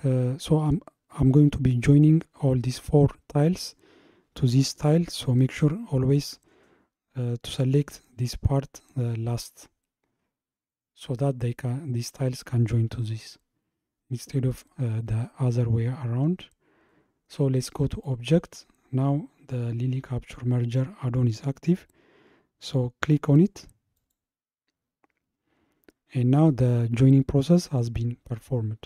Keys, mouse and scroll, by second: 17.9-21.1 drag, 27.0-27.5 scroll down 2.